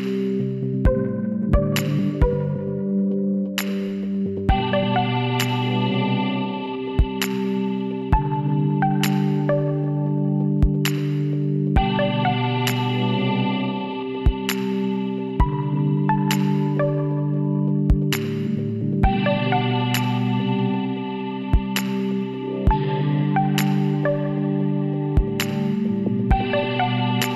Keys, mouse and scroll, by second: 1.5 Tab, 4.8-6.4 drag, 8.0 shift+d, 9.6 r, 14.5-16.3 middle drag, 16.3-17.6 drag, 17.6 middle click, 18.6 z, 21.1 middle click, 22.0-24.7 middle drag, 24.7-26.3 drag.